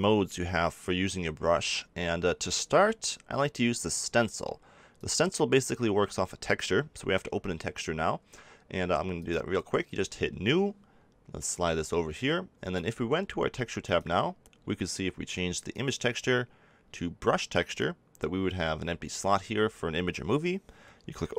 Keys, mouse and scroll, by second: 9.1-15.4 drag, 15.7-17.6 drag, 21.3 click.